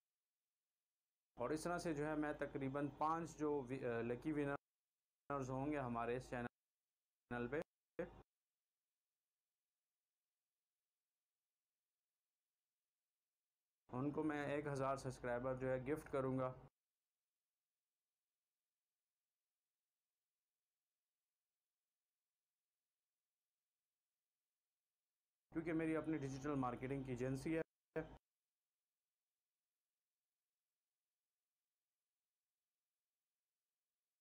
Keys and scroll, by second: 0.6 shift+Delete, 1.3 space, 4.5 space, 8.9 c, 11.7 v, 13.2 shift+Delete, 13.8 space, 16.6 space, 17.4 c, 21.7 b, 23.3 v, 24.9 shift+Delete, 25.5 space, 27.6 space, 28.9 c, 32.1 b.